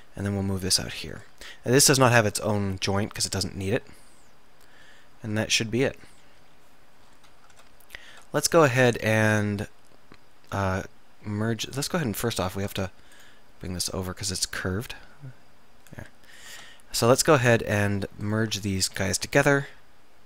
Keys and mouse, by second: 0.0 e, 1.3-3.1 drag, 4.0-7.1 middle drag, 6.3 KP_7, 8.2 Tab, 8.8 Tab, 12.8 Tab, 16.5 Tab.